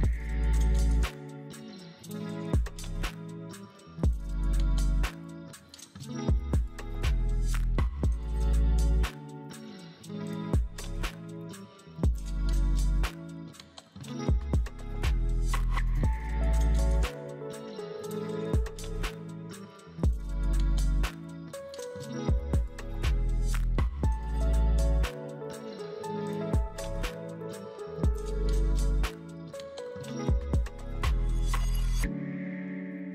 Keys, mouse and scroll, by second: 2.7 right click, 10.0 double click, 10.0 double click, 13.8 1, 14.0 Return, 14.0 Return, 15.9 Return, 20.0-20.9 typing, 27.8 ctrl+shift+F12.